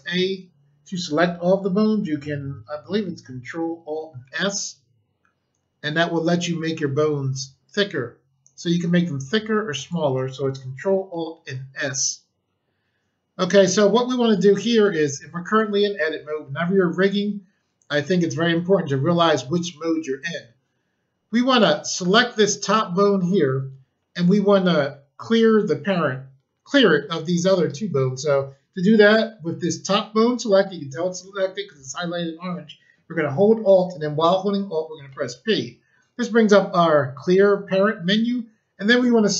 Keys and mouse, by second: 4.2 ctrl+alt+s, 9.7 click, 21.5 click, 35.0 alt+p.